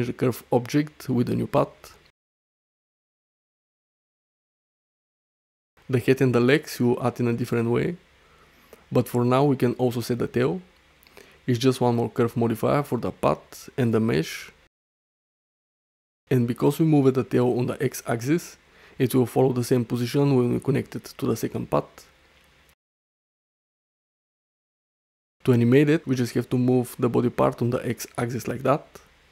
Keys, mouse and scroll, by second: 0.2 click, 2.6-2.9 middle drag, 3.4-5.3 middle drag, 5.7 shift+middle click, 5.9 middle drag, 6.5 shift+middle click, 6.8 middle click, 10.3-11.1 middle drag, 11.9 click, 16.5 middle click, 16.8-17.4 middle drag, 17.5 shift+middle click, 17.7 middle click, 18.3 shift+middle click, 18.6 middle drag, 20.4-21.7 middle drag, 22.2 shift+middle drag, 22.7 middle click, 23.2 shift+middle click, 23.5 middle click, 23.9 drag, 27.4 g, 28.1 x.